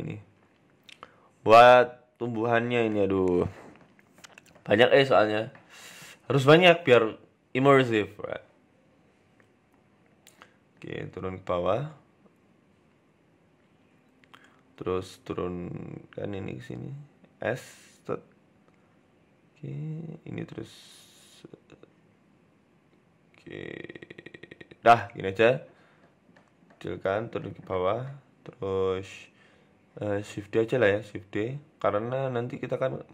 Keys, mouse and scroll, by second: 0.2 s, 0.9 s, 1.9 s, 2.7 s, 3.6-4.1 scroll up 5, 3.8 shift+middle click, 4.1 shift+a, 7.2-7.6 scroll down 4, 7.6 g, 8.3 shift+middle click, 8.6 s, 9.2-9.6 scroll up 4, 9.7 g, 10.5-11.0 scroll up 2, 10.7 shift+middle click, 11.0 Tab, 11.6 click, 11.6-12.1 scroll up 1, 12.6 click, 13.1 click, 14.5 g, 19.7 click, 20.1 s, 22.2 click, 22.8 s, 24.5 Tab, 24.9 shift+middle click, 25.2-26.0 scroll down 3, 26.0 s, 26.5 g, 27.7 shift+middle click, 28.0-28.5 scroll down 3, 28.3-28.9 scroll up 2, 28.5 Tab, 28.9 Tab, 30.2 shift+d, 31.5 r.